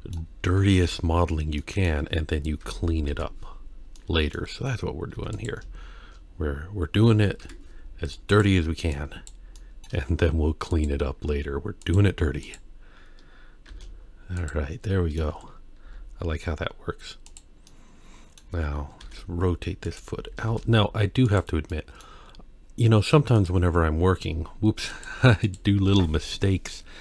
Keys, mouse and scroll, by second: 0.8 ctrl+3, 1.6 middle drag, 2.6 Tab, 3.1 KP_1, 4.0 middle click, 5.1 2, 5.3 click, 7.4 KP_1, 8.1 click, 8.9 click, 9.6 middle click, 10.7 shift+click, 11.8 shift+click, 12.4 shift+click, 13.7 shift+e, 14.9 middle click, 15.3 Tab, 15.9 z, 17.7-18.4 middle drag, 19.0 r, 20.3 g, 21.7-22.0 middle drag, 23.4 click, 24.9 click, 25.4-27.0 drag.